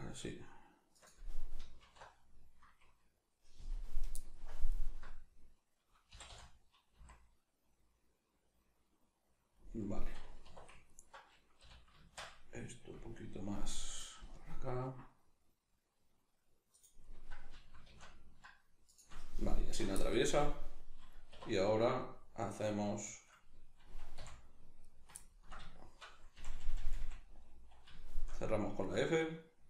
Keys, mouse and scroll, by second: 1.0 click, 1.8 alt+h, 3.3-4.7 scroll up 1, 4.7 alt+right click, 6.1 g, 9.5 click, 10.4 2, 10.8 alt+right click, 11.6 g, 16.8 right click, 17.5 g, 18.9 shift+click, 20.3-28.8 middle drag, 21.3 2, 22.5 right click, 23.1 shift+right click, 24.2 f, 24.8 right click, 26.4 f, 28.8 right click.